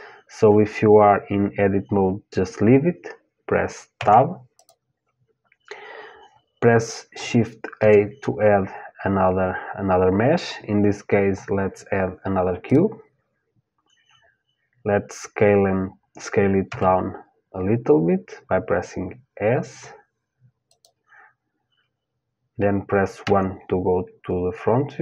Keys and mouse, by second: 3.6 Tab, 4.2-6.6 drag, 7.4 shift+a, 16.3 s, 22.8 KP_1.